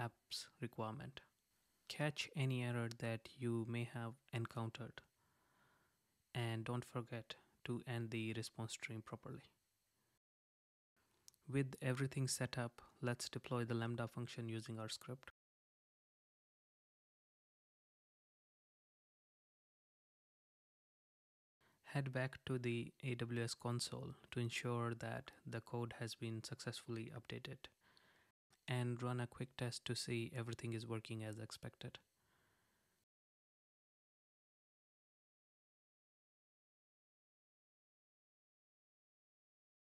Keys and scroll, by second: 0.0 super+z, 2.0 Right, 4.6 super+z, 6.7 Right, 9.8 super+z, 16.5 super+s, 17.8 Up, 18.6 Return, 23.3 super+r.